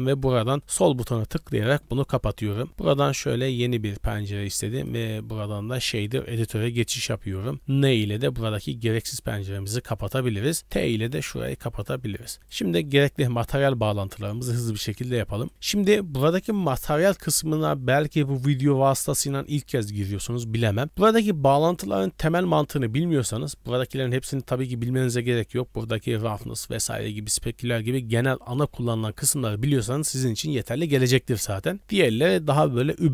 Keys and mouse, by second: 3.6 click, 4.8-6.0 drag, 6.6 n, 7.7 n, 8.9 n, 10.4 click, 11.3 t, 12.1 middle click, 12.4 click, 13.4 middle click, 14.1 click, 15.5 click.